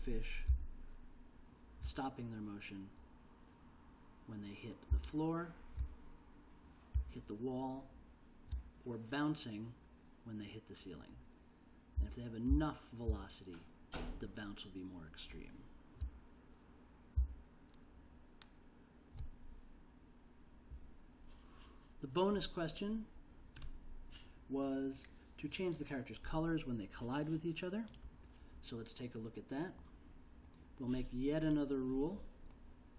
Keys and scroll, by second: 0.7 k, 5.1 j, 7.1 l, 12.2 i, 12.7 j, 13.2 i, 17.3 j.